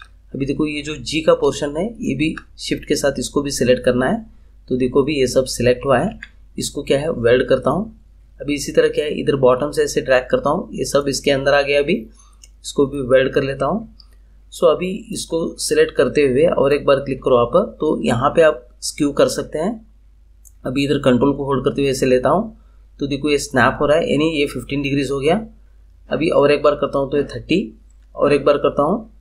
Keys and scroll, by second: 6.0 ctrl+z.